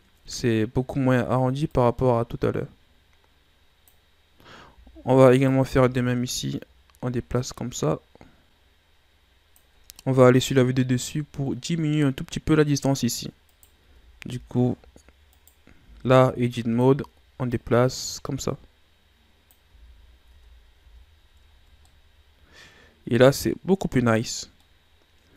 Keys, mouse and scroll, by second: 1.6-4.6 drag, 5.3 alt+right click, 6.2-9.3 drag, 10.0 KP_7, 11.1-11.4 ctrl+scroll up 3, 13.4 right click, 13.8 Tab, 14.2 z, 14.5-15.3 scroll up 1, 15.3 right click, 15.8 b, 17.4-19.7 drag, 19.7 z, 20.2 Tab, 20.7 a, 21.1-21.6 scroll down 2, 21.8-25.3 middle drag.